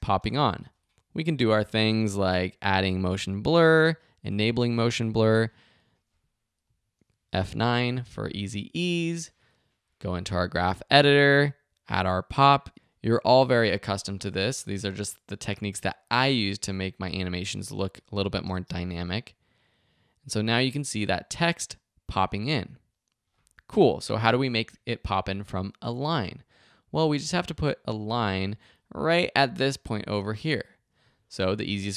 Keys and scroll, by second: 0.2 space, 7.4 F9, 18.4 space, 26.0 space.